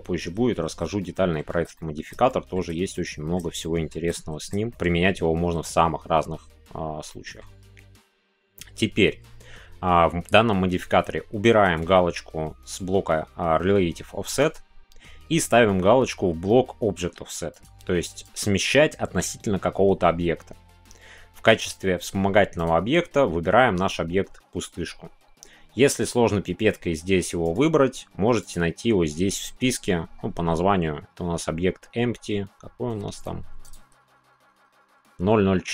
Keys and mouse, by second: 1.0 shift+middle click, 1.7 middle click, 2.2 shift+middle click, 2.9 middle click, 3.7 shift+middle click, 4.1 middle click, 7.2 middle click, 17.6-18.4 drag, 22.8-35.7 drag.